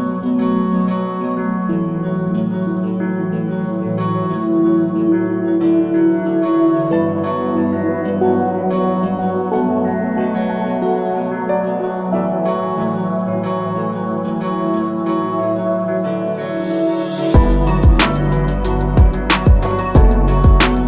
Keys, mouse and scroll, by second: 0.1 click, 0.9-1.3 scroll down 3, 1.8 scroll up 1, 2.5 click, 3.2-3.5 typing, 3.8 Return, 4.8 scroll down 2, 5.6 click, 5.9-6.8 scroll down 3, 7.9 click, 8.7-10.4 typing, 11.9 click, 12.5-13.0 typing, 13.3 Return, 14.2-14.6 scroll up 3, 14.7 alt+drag, 15.2 scroll down 2, 15.5 alt+middle click, 16.1 alt+middle click, 16.2 scroll up 1, 16.5 middle click, 17.6 click, 18.6 click, 19.2 click, 19.9 scroll up 2, 20.4 click.